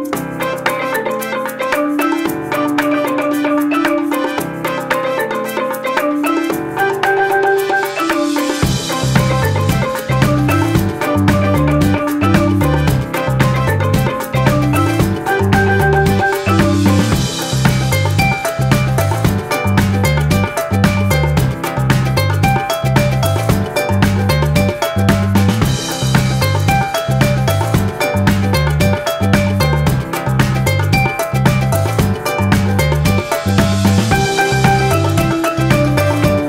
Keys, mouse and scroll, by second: 12.7 ctrl+-, 15.5 z, 24.2 ctrl+-, 35.0 z.